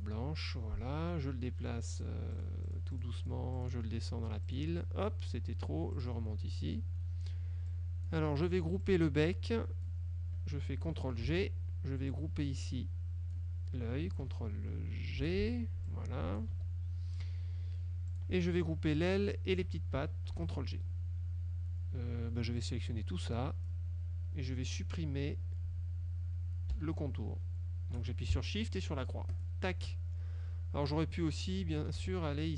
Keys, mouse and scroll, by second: 0.0 click, 2.0 click, 2.4 click, 4.6 click, 6.1 click, 6.9 click, 7.8 click, 9.0-10.2 drag, 11.4 ctrl+g, 12.2-13.6 drag, 15.3 ctrl+g, 16.0 click, 16.6 ctrl+z, 18.2 click, 19.2-19.8 shift+drag, 20.4 ctrl+g, 22.7-24.0 drag, 29.4 shift+click, 32.0 ctrl+z.